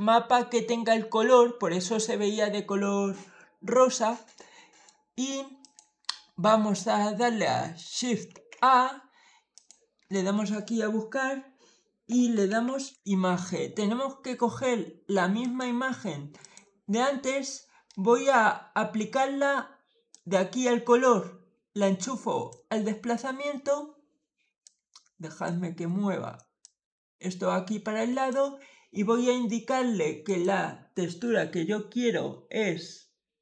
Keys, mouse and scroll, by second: 4.2 middle click, 5.5 click, 7.6 click, 8.2 shift+a, 9.4 click, 11.7-13.3 typing, 15.3 click, 16.3 click, 17.7 middle click, 20.0-22.3 drag, 24.5 click, 26.5-28.2 drag, 30.1 click.